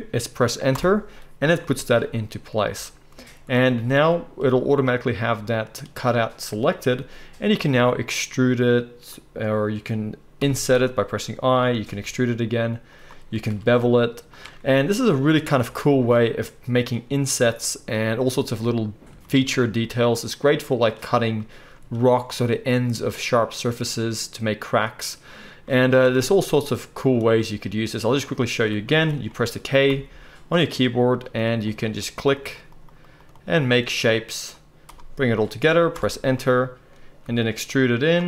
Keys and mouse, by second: 7.7 e, 9.2-14.9 middle drag, 10.3 i, 11.8 e, 13.4 ctrl+b, 15.6 Tab, 15.6-16.4 middle drag, 22.0-26.0 shift+middle drag, 26.0 Tab, 29.9 k, 37.2 e.